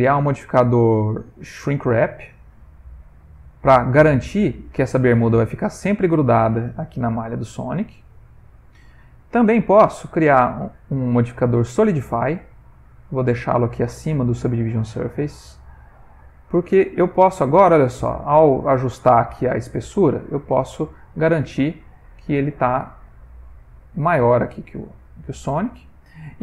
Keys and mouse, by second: 3.1 click, 5.9 click, 9.1 click, 13.4 click, 22.4 shift+click, 24.7 middle click, 25.0 middle click.